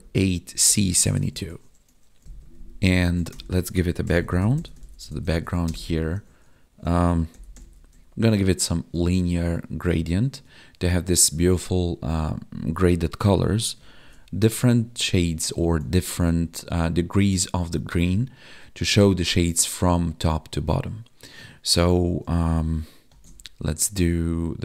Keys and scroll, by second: 1.2 ctrl+s, 2.2 ctrl+Down, 5.6 space, 10.3 Tab, 16.0 ctrl+z.